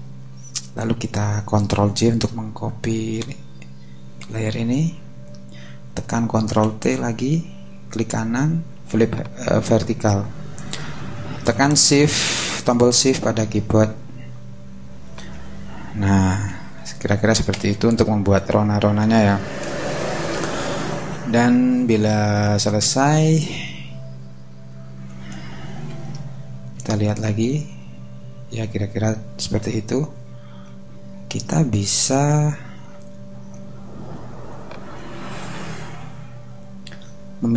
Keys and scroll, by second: 4.2 super+j, 6.6 super+t, 17.5 Return, 25.9 super+-.